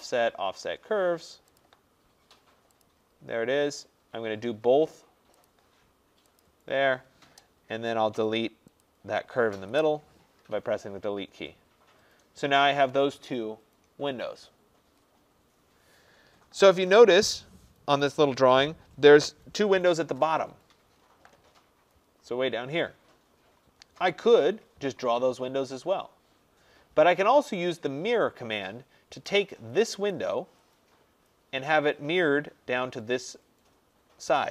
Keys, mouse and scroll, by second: 1.7 click, 6.5 click, 7.7 middle click, 7.8 middle click, 8.8 middle click, 8.9 click, 9.8 Delete, 11.0-11.3 scroll down 5, 20.9 middle click, 21.0 middle click, 21.5 middle click, 21.6 middle click, 21.6 middle click, 22.3 middle click, 22.3 scroll, 23.5-26.2 scroll, 27.5-28.4 scroll, 30.2 click.